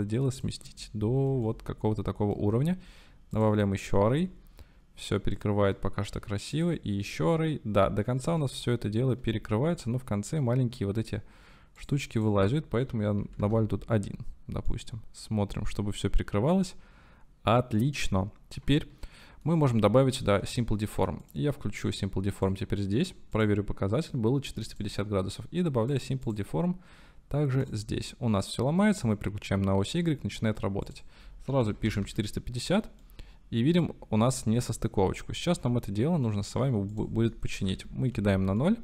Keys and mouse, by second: 1.0-1.4 middle drag, 1.5-2.1 shift+drag, 2.1 shift+middle click, 3.4 middle click, 4.3-5.5 shift+middle drag, 7.1-8.1 shift+middle drag, 8.5-9.2 shift+middle drag, 9.8 middle click, 11.9-14.1 middle drag, 14.7-16.2 middle drag, 17.8-18.5 middle drag, 18.7 shift+middle click, 22.3 click, 23.3 click, 25.9 click, 26.2-27.7 drag, 28.9-29.6 drag, 29.6-30.1 middle drag, 31.0-32.7 drag, 33.0-36.3 middle drag, 37.1-38.4 drag, 38.6-38.8 middle drag.